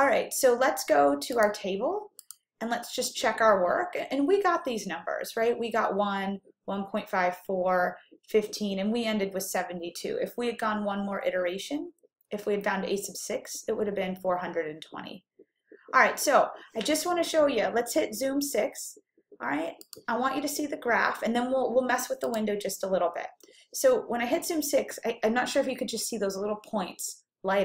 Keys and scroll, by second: 22.4 6.